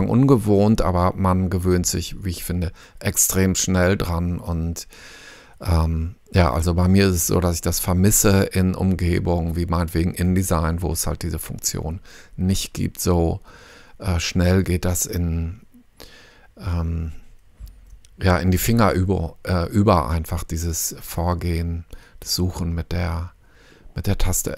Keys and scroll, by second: 22.2 f.